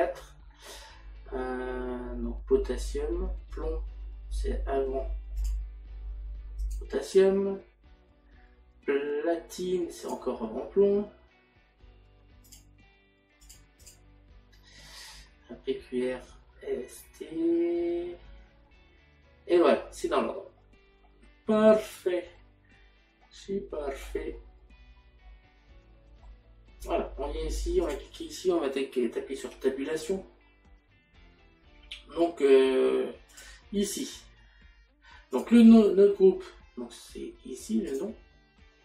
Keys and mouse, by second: 5.4 click, 6.7 click, 10.1 click, 12.5 click, 23.2 middle click, 25.3 middle click, 27.9 click, 33.3 click, 35.4 click.